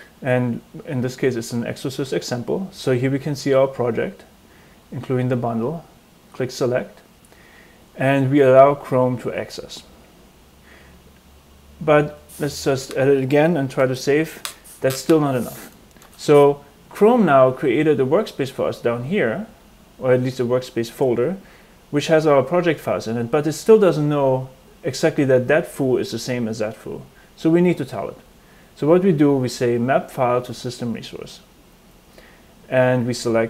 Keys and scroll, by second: 12.6 f, 14.6 super+s, 16.0 BackSpace.